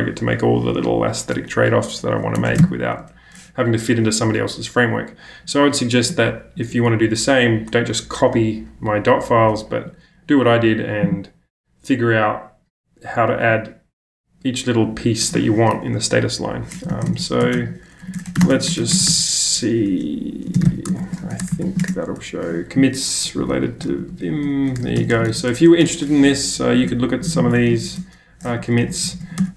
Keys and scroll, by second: 2.4 BackSpace, 2.5 ctrl+space, 2.6 ctrl+], 16.6-18.9 typing, 20.4-25.8 typing, 27.8 super+c, 28.2-29.5 typing.